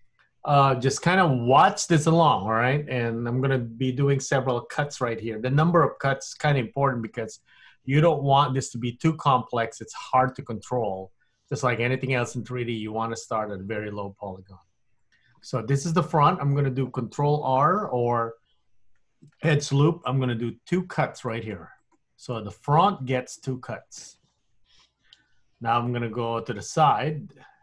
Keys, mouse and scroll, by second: 0.3-0.7 scroll down 1, 14.8 scroll up 1, 15.0-15.6 scroll down 2, 15.6 middle click, 19.1 ctrl+r, 22.4 middle click, 25.9 middle click.